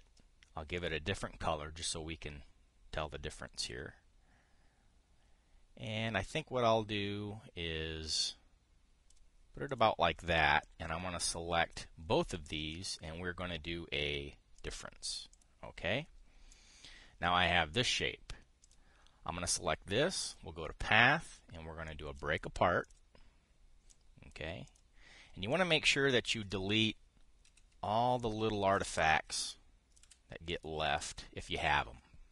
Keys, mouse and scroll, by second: 0.4 click, 1.5 click, 2.5-9.9 drag, 10.4 click, 11.3-12.5 drag, 13.4 click, 15.3 click, 16.0 click, 17.2-18.3 drag, 18.5 click, 19.3 click, 20.9 click, 22.6 click, 23.5 click, 24.6 click, 25.4 drag, 26.2-27.3 drag, 28.2 Delete, 28.9-29.6 drag, 29.6 Delete, 30.2-30.7 drag, 30.7 Delete, 31.2-31.8 drag, 31.8 Delete.